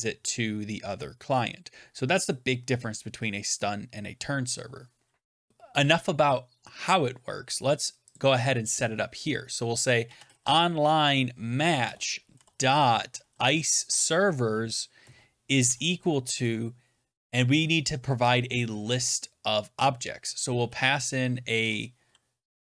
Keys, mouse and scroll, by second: 5.5-7.3 drag, 8.0 click, 9.7-10.8 typing, 11.6 Down, 11.7 Return, 12.7-13.8 typing, 15.3-16.0 typing, 20.2-21.5 typing.